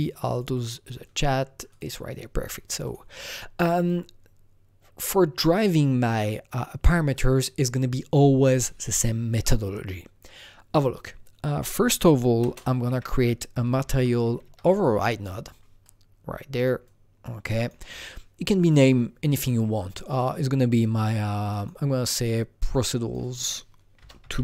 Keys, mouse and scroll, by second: 1.6 click, 2.8 click, 11.9 ctrl+Num_Lock, 11.9 click, 12.3 ctrl+space, 12.8-13.9 typing, 14.4 Down, 14.9 Return, 15.8-20.0 drag, 20.0 click, 21.4 click, 21.5 double click, 22.1 click, 22.7-24.4 drag, 23.9-24.4 typing.